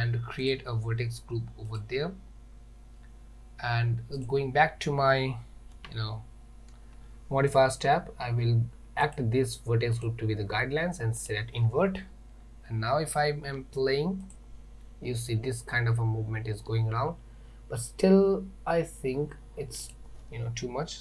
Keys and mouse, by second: 1.8 click, 5.8 Tab, 9.2 click, 11.2 click, 14.3 click, 19.9-21.0 drag.